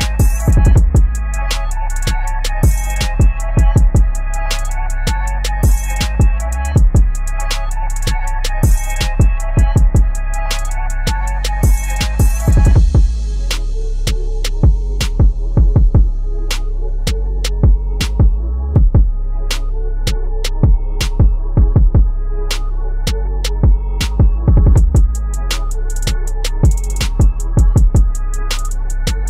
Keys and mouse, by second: 2.7 ctrl+-, 3.9 space, 4.1 click, 4.7 t, 7.3 click, 11.5 F7, 14.1 shift+c, 14.5 h, 16.1-19.9 typing, 21.1-23.4 drag, 23.4 typing, 23.8 click, 24.9-27.7 typing.